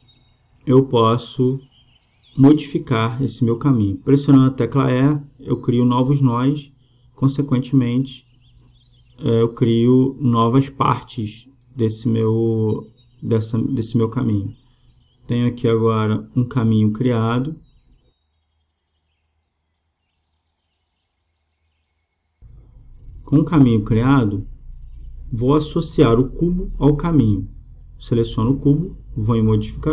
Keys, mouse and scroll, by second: 0.4-2.3 right drag, 1.5 e, 5.2 e, 6.4 e, 7.5 e, 9.7 right click, 9.8 b, 10.5 Delete, 11.3 b, 12.5 g, 19.0 a, 19.3 b, 21.1 g, 26.0 Tab.